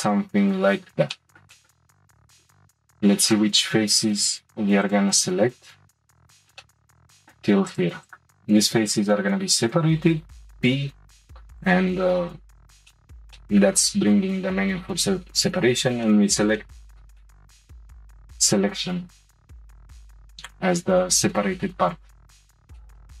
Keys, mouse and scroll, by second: 1.1 middle click, 1.2 scroll up 1, 2.0-2.3 scroll down 1, 2.3 3, 3.3 click, 4.8 click, 6.4 shift+click, 6.5 shift+middle click, 6.9 middle click, 7.7 shift+click, 8.0 shift+click, 10.0 p, 12.4 scroll down 2, 12.9-17.7 shift+middle drag, 17.7-20.7 scroll up 2, 21.9 click, 22.8-23.2 shift+middle drag.